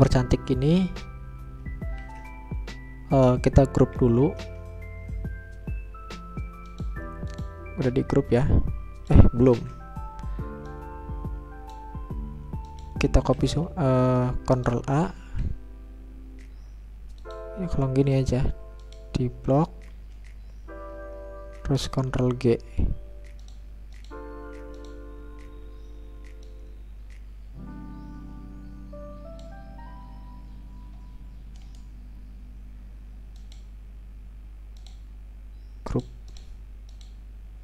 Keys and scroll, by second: 3.3 ctrl+a, 3.9 ctrl+g, 12.3 ctrl+z, 15.3 ctrl+a, 22.3 ctrl+shift+g.